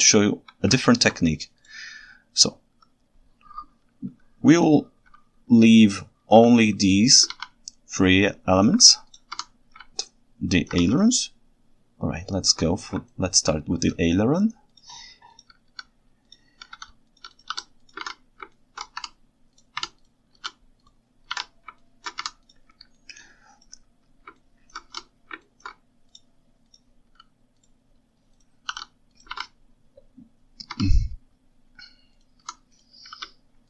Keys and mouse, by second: 0.9 ctrl+alt+right drag, 6.3 shift+h, 7.3 alt+a, 8.2-8.7 ctrl+alt+right drag, 9.4 Tab, 10.1 ctrl+shift+right click, 11.0-12.6 ctrl+alt+right drag, 13.1 ctrl+alt+right click, 17.4 right click, 17.5 shift+s, 18.0 alt+a, 18.6 ctrl+alt+right click, 19.0 Tab, 19.9 Tab, 20.4 shift+s, 21.4 alt+a, 21.9 ctrl+alt+right click, 22.3 Tab, 23.0-23.7 ctrl+shift+right drag, 24.5 ctrl+alt+right drag, 25.5 ctrl+alt+right click, 26.7 click, 29.4 alt+a, 30.8 Tab, 33.2 shift+s.